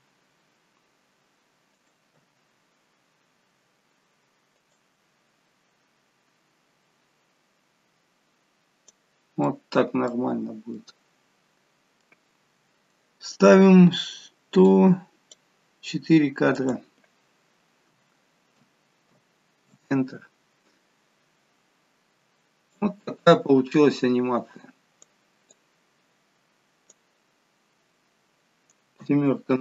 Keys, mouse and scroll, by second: 2.2 g, 9.5 middle click, 10.8 middle click, 14.7 click, 16.6 click, 21.2-22.2 scroll down 8, 22.8 click, 25.5 click, 27.4-28.1 scroll down 4, 29.0 KP_7.